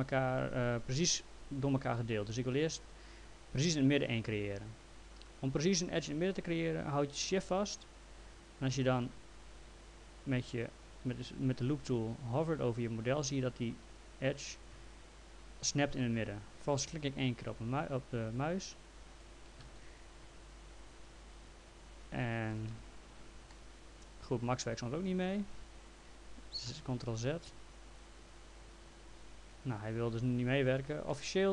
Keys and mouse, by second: 18.3 shift+click, 19.7 ctrl+z, 20.8 shift+click, 22.8 p, 23.5 alt+middle click, 28.0 shift+click, 29.1 ctrl+z, 31.1 alt+middle click.